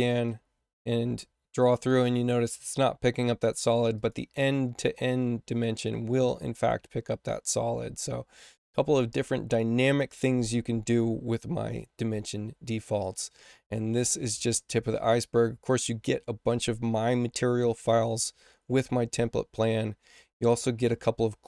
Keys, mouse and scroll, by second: 0.2-1.5 drag, 3.9 click, 5.0 click, 15.5 click.